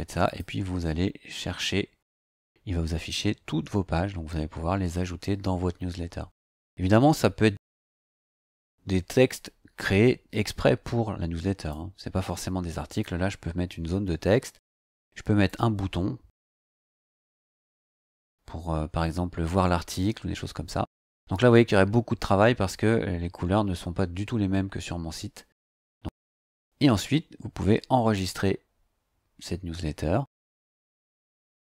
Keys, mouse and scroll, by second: 0.2 click, 2.1 click, 8.3 click, 11.7-13.2 drag, 15.5-17.3 drag, 21.8 scroll up 2, 22.4 scroll up 2, 22.9 scroll up 2, 23.7-24.4 scroll up 4, 24.7 scroll up 1, 28.1 click.